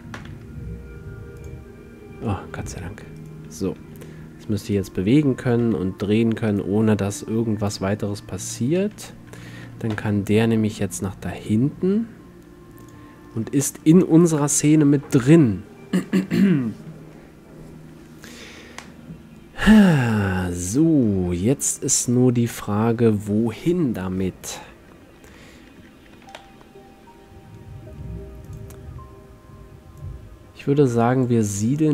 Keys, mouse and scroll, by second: 0.3 ctrl+p, 0.3 click, 1.0 click, 2.4 drag, 4.0 g, 5.6 r, 7.2-8.6 drag, 8.6 a, 8.9 a, 10.0 m, 12.9-15.5 drag, 14.4 KP_7, 21.1-24.2 middle drag, 25.5-27.4 middle drag, 26.2 g, 28.6-31.9 drag.